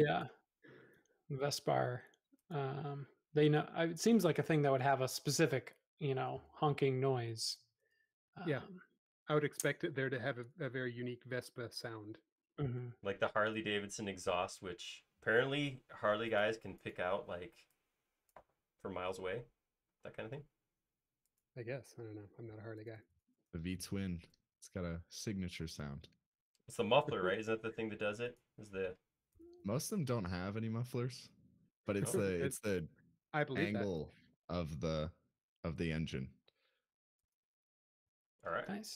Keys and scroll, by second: 0.2 m, 3.5 a, 11.5 space, 11.9 l, 14.4 typing, 17.4 shift+p, 18.7-19.6 typing, 22.2-22.6 typing, 25.3 m, 29.0 space, 29.9 e, 34.7 space, 36.4 m, 37.0 space, 38.2 typing.